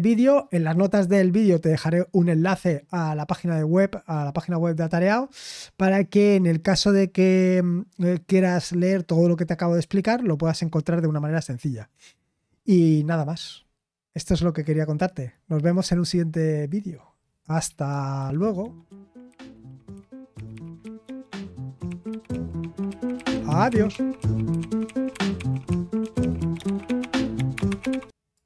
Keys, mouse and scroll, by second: 18.2 super+x.